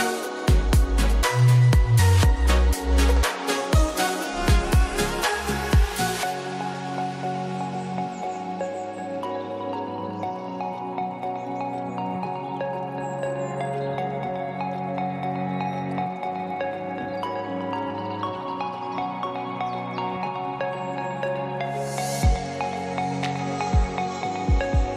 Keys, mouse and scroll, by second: 1.0 click, 6.8-8.0 drag, 23.9 click.